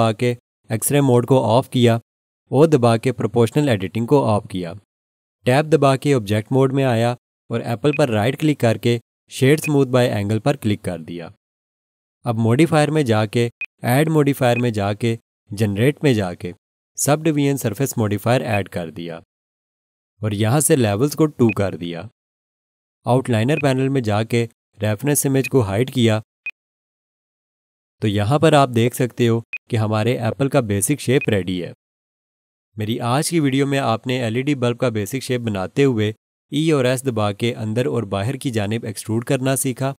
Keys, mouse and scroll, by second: 0.0 alt+z, 3.6 o, 6.0 Tab, 7.9 right click, 9.6 click, 13.6 click, 18.5 click, 28.7 scroll down 1, 29.5 alt+shift+click, 30.1 scroll up 1, 31.2 alt+click.